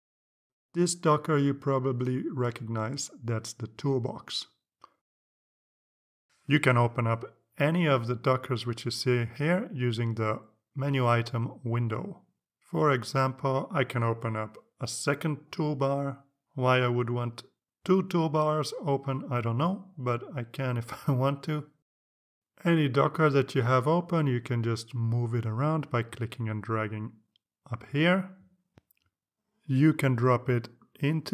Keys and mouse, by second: 5.5 click, 16.5 click, 18.3-31.3 drag.